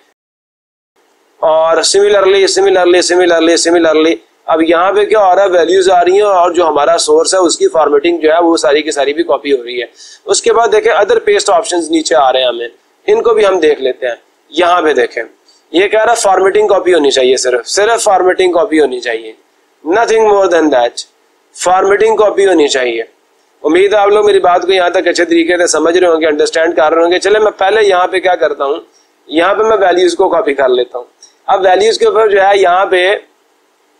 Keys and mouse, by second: 29.5 click, 30.5 click, 31.7 click, 32.8 click.